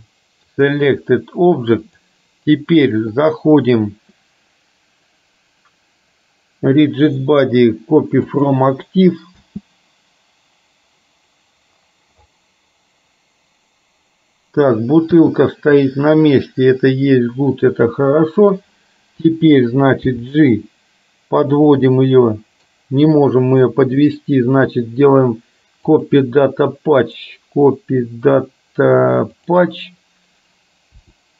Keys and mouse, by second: 2.0-8.9 drag, 9.5 space, 15.1 space, 16.0-17.8 middle drag, 20.1 g, 22.0 middle click, 24.1-26.2 right drag, 27.4-29.6 right drag, 31.1 r.